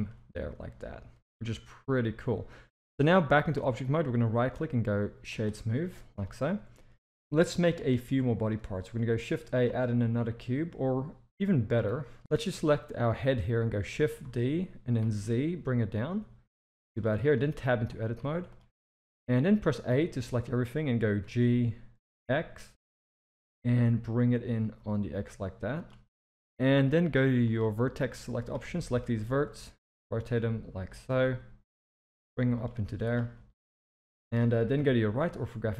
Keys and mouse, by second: 0.0-2.5 middle drag, 3.1-3.4 middle drag, 4.1-5.4 right drag, 6.1 KP_1, 7.5 shift+middle drag, 8.4 shift+a, 11.8 x, 12.2 shift+d, 14.2 shift+d, 17.2 shift+middle drag, 17.5 Tab, 18.2 z, 19.9 a, 21.2 g, 27.4 click, 28.1-28.5 drag, 28.7 shift+middle drag, 29.5 r, 31.2 g, 32.8 z, 33.5 middle click, 34.7 KP_3, 35.6 z.